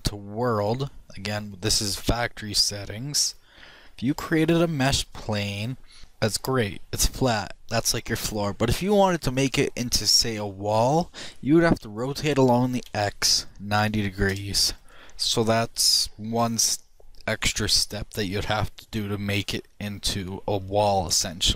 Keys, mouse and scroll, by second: 3.8 shift+s, 4.8 shift+a, 7.4-12.3 middle drag, 12.3 r, 20.2-21.5 middle drag.